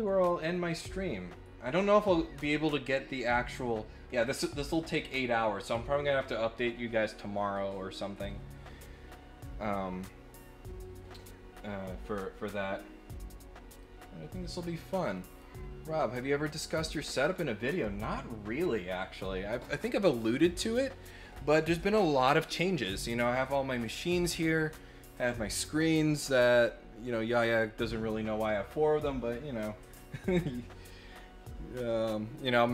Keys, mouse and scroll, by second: 0.3-0.9 scroll up 6, 13.8-15.3 right drag.